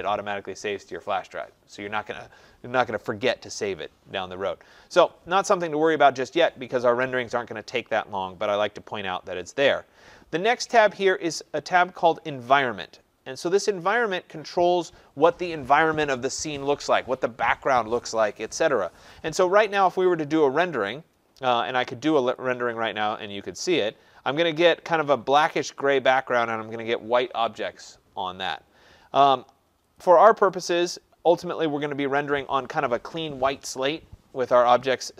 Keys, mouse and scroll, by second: 6.1 click, 8.7 click, 12.2 click, 14.7-17.2 drag, 22.4-27.4 drag, 30.0 click.